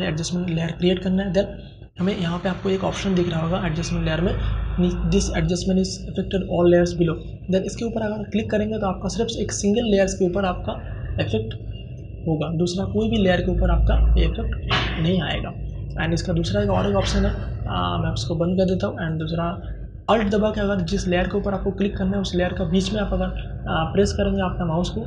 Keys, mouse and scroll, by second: 7.5 click, 17.9 click, 17.9 click.